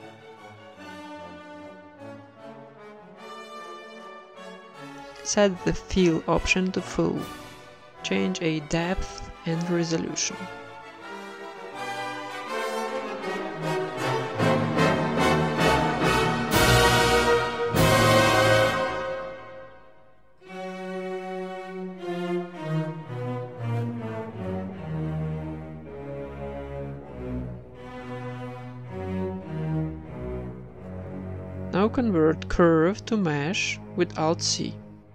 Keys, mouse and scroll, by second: 0.0-2.0 typing, 2.3 Tab, 3.4-4.8 drag, 5.8-7.8 drag, 7.9-8.9 drag, 10.0 Tab, 10.3-14.7 right drag, 10.5 alt+s, 11.5 alt+s, 12.4 alt+s, 13.1 g, 13.9 g, 14.2 Tab, 14.5 z, 14.7-16.1 middle drag, 15.7 click, 16.2 click, 16.2 middle click, 16.5 z, 16.6 middle click, 16.9 KP_1, 17.8 click, 18.3 z, 18.7 middle click, 19.3 Tab, 19.6 Tab, 20.2 KP_1, 20.9 right click, 21.4-24.0 drag, 22.8-24.1 middle drag, 23.8-24.8 right drag, 24.5-27.2 typing, 24.8 Tab, 25.3 right click, 26.4-27.4 right drag, 29.0 shift+z, 29.5 middle click, 29.7 Tab, 31.5 alt+v, 31.9 alt+c, 34.2-35.0 middle drag, 34.7 s.